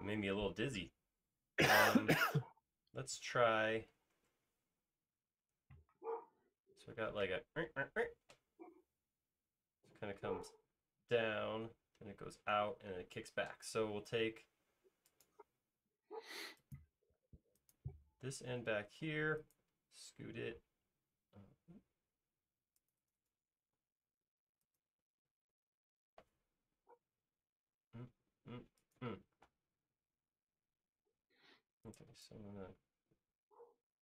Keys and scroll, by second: 3.1 |, 4.2 super+z, 4.8 space, 19.1 m, 20.6 space, 24.0 m, 27.1 Up, 27.7 Down, 28.3 Left, 29.4 space, 30.5-32.1 typing.